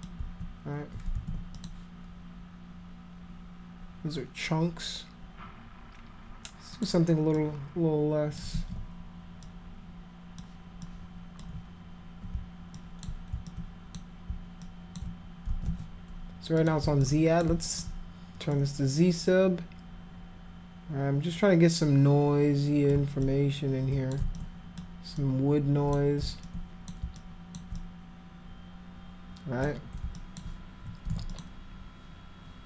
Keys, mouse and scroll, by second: 1.1 ctrl+z, 1.6 click, 6.8 click, 7.4-8.4 drag, 8.6 ctrl+z, 9.4 click, 10.9 click, 12.8 alt+click, 13.5 alt+click, 14.7 alt+click, 15.5 ctrl+z, 16.6 click, 17.0 alt+click, 17.7 alt+click, 18.5-22.9 drag, 23.2 click, 24.4 click, 25.2 click, 26.5 alt+click, 27.2 alt+click, 27.8-29.7 drag, 30.2 alt+click, 31.1 ctrl+z, 31.3 click.